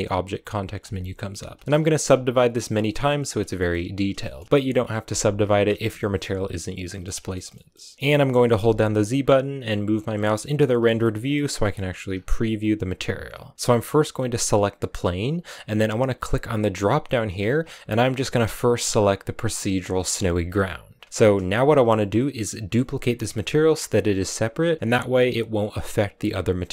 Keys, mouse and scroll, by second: 2.7 middle click, 3.1 scroll down 1, 3.4 shift+middle click, 3.9 scroll down 1, 4.1 shift+middle click, 4.4 right click, 5.3-7.3 shift+middle drag, 7.3 scroll down 1, 7.4 middle click, 7.7 g, 7.9 z, 8.4 z, 10.6-12.0 shift+middle drag, 12.0-13.5 scroll down 3, 13.5 right click, 14.3 right click, 16.1-21.0 drag, 21.4-25.4 shift+middle drag, 25.4-26.7 right drag.